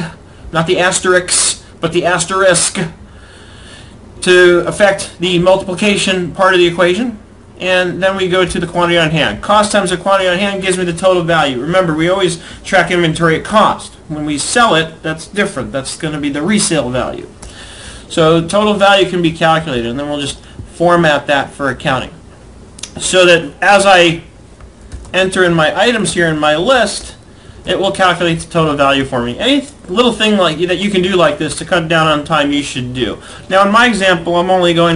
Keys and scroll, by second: 8.2 Left, 17.2 Return, 18.0 Up, 24.6 ctrl+c, 25.4 shift+Down, 27.0 Return, 27.8 Down, 28.5 ctrl+Left, 28.6 Right, 32.2 Left.